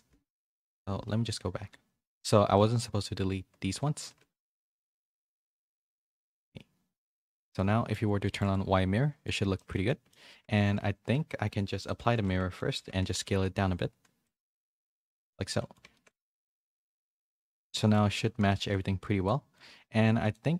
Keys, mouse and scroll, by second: 0.4 KP_1, 1.0 z, 1.7 z, 2.4 b, 4.0 x, 4.7 z, 4.9 middle click, 5.3 shift+middle click, 5.7 middle click, 6.0 Tab, 7.0 click, 7.5 middle click, 8.2 shift+middle click, 8.5 middle click, 9.5 shift+middle click, 9.8 middle click, 10.3 Tab, 10.6 a, 11.1 Tab, 11.7 click, 12.0 ctrl+a, 12.5 middle click, 13.0 a, 13.3 s, 14.5-16.1 middle drag, 16.2-17.9 middle drag, 18.0 Tab, 18.4 a, 18.6 a, 18.7 middle click.